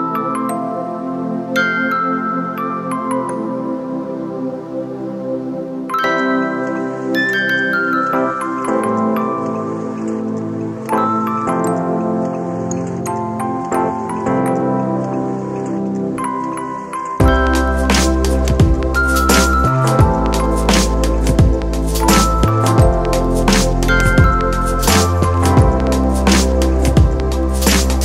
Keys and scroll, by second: 8.3 space, 9.9 space, 11.8 super+z.